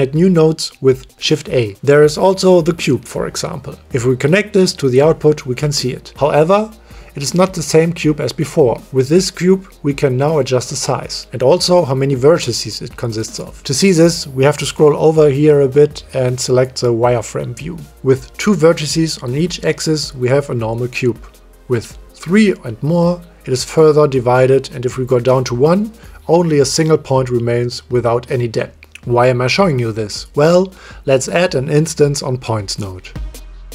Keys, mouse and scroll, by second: 1.2 shift+a, 2.3 BackSpace, 4.8 click, 10.3 click, 11.3 click, 12.1 click, 13.0 click, 15.0 click, 19.8 click, 20.0-21.1 middle drag, 21.4-23.7 middle drag, 25.4 click, 26.5 click, 28.6-29.6 drag, 29.8 middle click, 31.0 click, 31.2 click, 31.7 click, 33.4 shift+a.